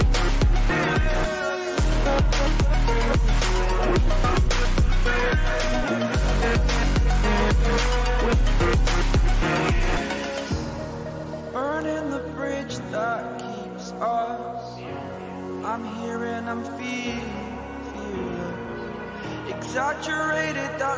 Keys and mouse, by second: 11.5 click.